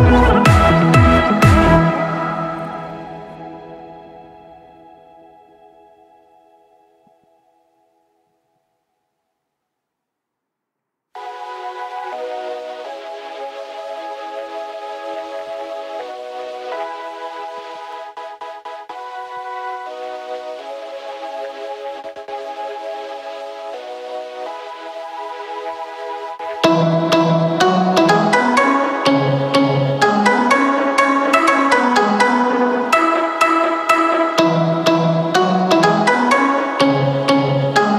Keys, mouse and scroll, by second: 27.0-32.8 drag.